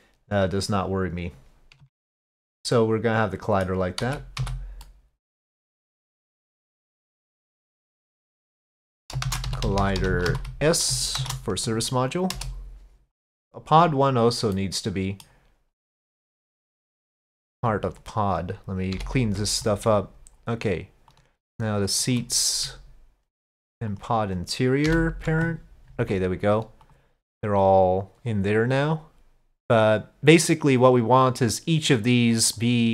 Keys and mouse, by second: 1.8 Tab, 2.5-3.7 middle drag, 4.1 z, 4.9-5.8 middle drag, 8.0-12.4 drag, 9.8 l, 13.2-14.5 drag, 18.0 ctrl+click, 19.0 ctrl+p, 21.1 click, 21.9 shift+click, 23.9 ctrl+click, 24.9 ctrl+p, 29.8 click, 31.0 click.